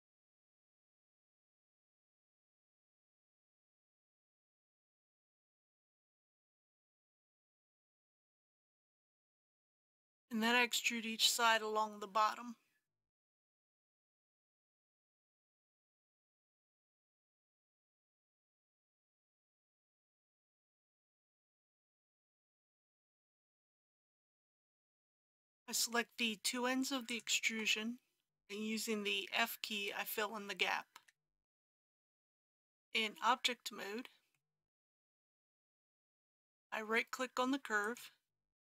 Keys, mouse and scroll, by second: 1.7 click, 4.7 e, 5.1 z, 8.5 click, 13.2 e, 13.5 x, 17.2 click, 20.8 e, 21.1 x, 24.0 click, 27.0 shift+click, 30.9 f, 32.2 click, 32.2 Tab, 34.4 middle click, 35.2-37.9 scroll up 1, 37.9 right click.